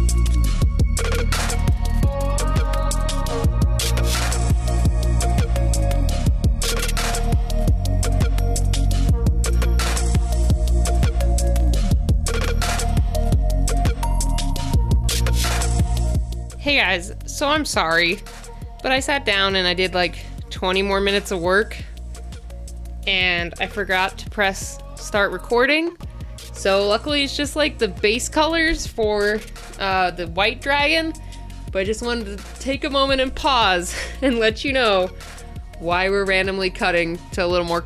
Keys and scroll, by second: 1.6 space, 4.3 space, 6.3 space, 7.5 space, 7.9 space, 8.9 space, 9.2 ctrl+z, 11.8 space, 12.0 space, 12.8 space.